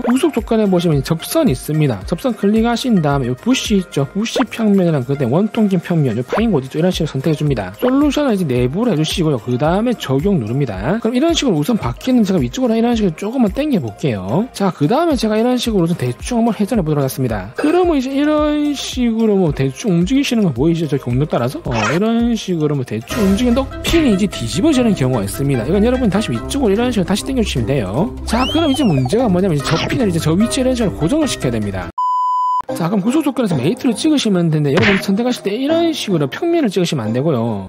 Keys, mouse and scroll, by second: 0.6 c, 2.7 click, 3.2 shift+middle click, 5.0 click, 5.4 shift+middle click, 7.8 click, 9.1 click, 10.3 click, 13.0-14.5 drag, 15.4 click, 16.2 middle click, 17.6-19.7 drag, 20.3-23.0 drag, 27.0-27.7 drag, 28.1 click, 28.8 click, 30.0 middle click, 34.5 middle click.